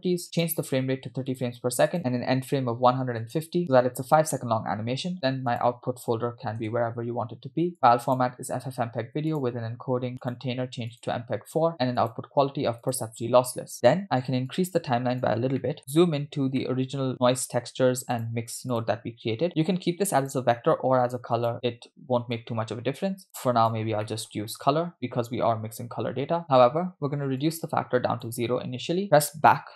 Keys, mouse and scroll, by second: 0.4-1.5 drag, 1.9-3.3 drag, 4.8 scroll down 2, 5.5-6.7 drag, 6.7 /, 7.7-8.2 drag, 8.5-10.2 scroll down 3, 9.3 click, 10.2 scroll down 1, 10.2-11.2 drag, 12.0-13.1 drag, 14.5 click, 15.6 middle click, 15.8-16.1 scroll up 6, 16.6 middle click, 17.5-17.8 scroll up 1, 18.2 click, 18.8 click, 20.2-21.5 drag, 22.4-23.7 drag, 24.1 middle click, 24.9-26.4 drag, 27.4 click, 29.4 Left.